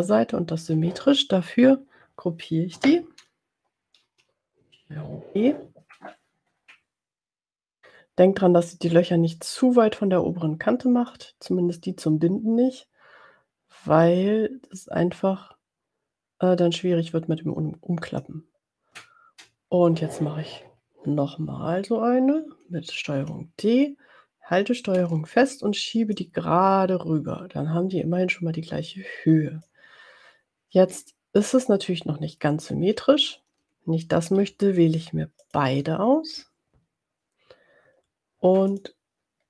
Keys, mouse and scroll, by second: 4.0 ctrl+g, 11.0 click, 23.3 ctrl+d, 26.3-29.8 ctrl+drag, 35.7 shift+click, 38.8 click.